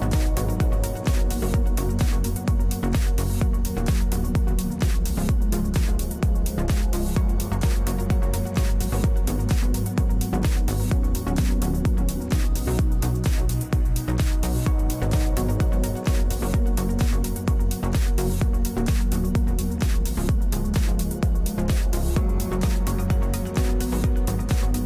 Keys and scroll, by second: 11.1 Return, 12.6 w, 19.7 3.